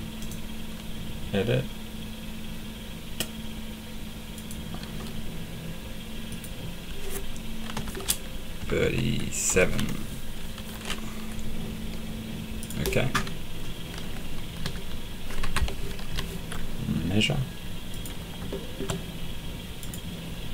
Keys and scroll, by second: 7.7 BackSpace, 8.6 3, 8.8 Right, 9.5 BackSpace, 10.5 7, 14.6 d, 15.4 Escape, 16.1 m.